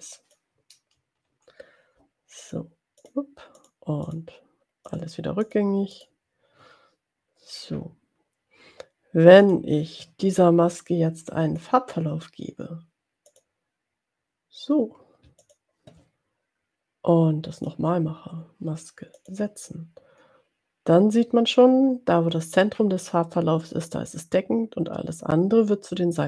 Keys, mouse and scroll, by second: 3.1 click, 3.8 click, 4.1 click, 4.9 click, 6.0 click, 9.5 click, 11.9 click, 13.3 click, 15.5 shift+click, 17.5 click, 19.3 click.